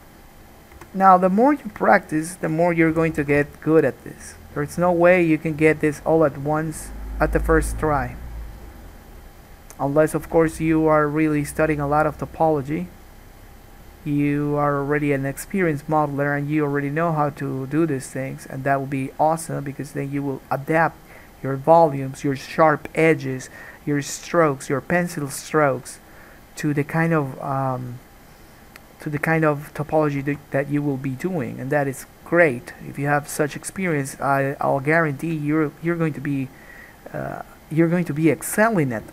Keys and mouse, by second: 1.0 3, 1.8 shift+click, 2.5-6.6 shift+drag, 3.1 f, 3.5 alt+a, 3.6 1, 4.2-8.5 middle drag, 4.2-6.6 right drag, 10.7 alt+a, 24.9-30.2 middle drag, 29.3 g, 30.2-36.4 alt+drag, 30.5 alt+a, 37.3 middle click.